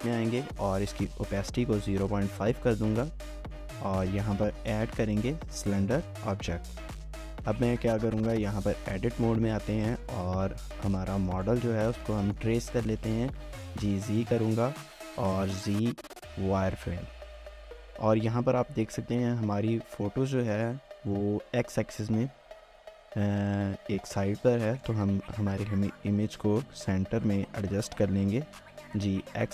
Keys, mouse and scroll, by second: 3.1 scroll up 1, 3.4 shift+middle click, 4.5 a, 6.6 shift+middle click, 7.3 scroll up 1, 7.8-8.2 scroll down 1, 8.2 Tab, 9.7 s, 11.7 scroll up 1, 12.1-13.6 typing, 12.2 shift+middle click, 12.5 scroll up 1, 14.7 shift+middle click, 15.2 typing, 18.3 Tab, 19.0 typing, 24.8-25.8 typing.